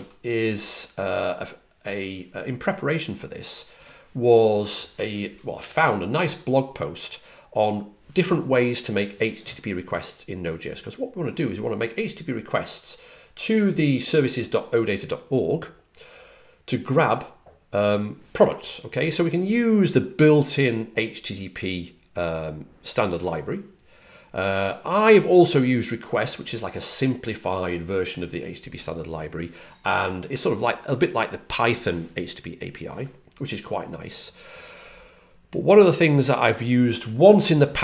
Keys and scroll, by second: 5.6 alt+super+Right.